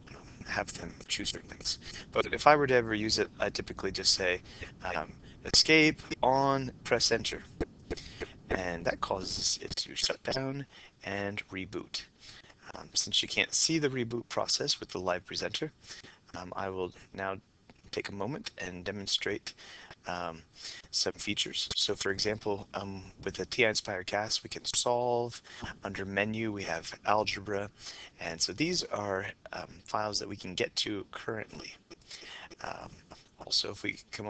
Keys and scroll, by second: 7.5 Return.